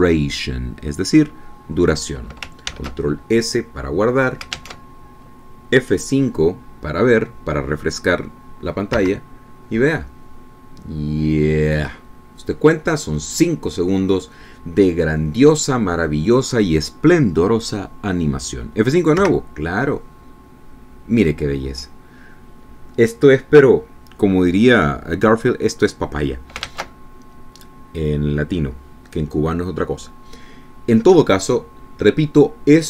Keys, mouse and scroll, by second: 4.3 ctrl+s, 6.3 alt+Tab, 10.6 F5, 20.8 F5, 28.4 alt+Tab.